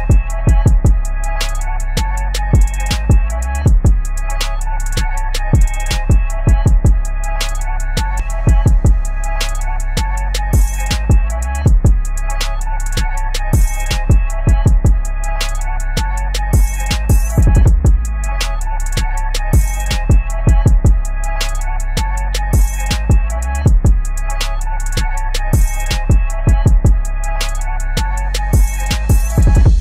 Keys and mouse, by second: 12.6 ctrl+], 14.1 click, 16.3 ctrl+a, 18.1 click, 20.5 ctrl+g, 21.0 ctrl+a, 21.4 click, 21.8 ctrl+d, 22.8 ctrl+click, 24.9 shift+s, 25.2 w, 25.9 Down, 27.3 Return.